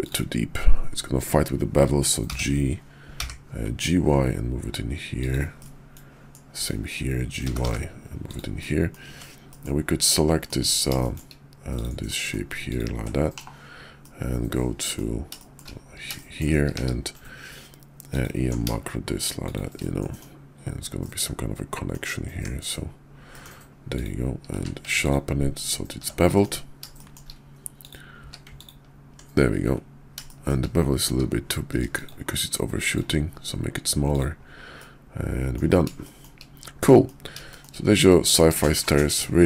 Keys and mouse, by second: 2.2 g, 5.6 middle click, 7.3 g, 8.6 middle click, 9.1 Tab, 9.4 middle click, 10.0 middle click, 10.9 shift+middle click, 11.6 click, 12.0 middle click, 12.6 ctrl+click, 13.2 /, 14.0 middle click, 15.3 shift+click, 15.4 shift+middle click, 16.1 shift+middle click, 16.7 q, 19.8 middle click, 21.0 middle click, 22.3 Tab, 23.2 middle click, 23.8 click, 24.4 q, 26.3 middle drag, 26.9 shift+middle click, 28.1 q, 30.2 shift+middle drag, 32.0 shift+q, 34.0 click, 34.7 middle click, 36.0 shift+middle click, 36.8 middle click, 37.4 shift+middle click, 38.0 middle click, 38.6 shift+middle click.